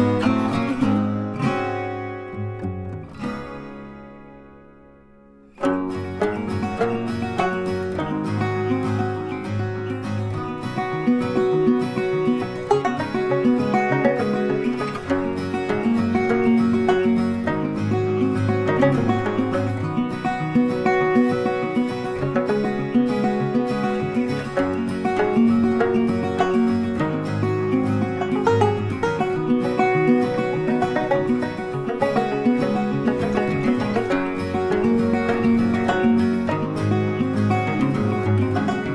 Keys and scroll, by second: 23.9 ctrl+t.